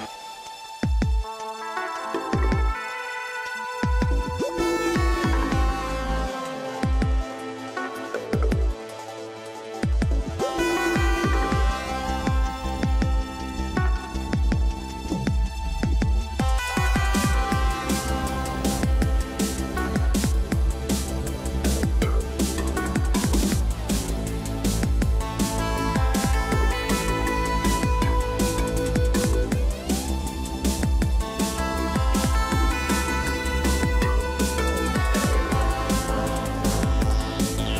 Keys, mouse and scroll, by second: 28.5 shift+click, 29.3 shift+click, 29.5 ctrl+g.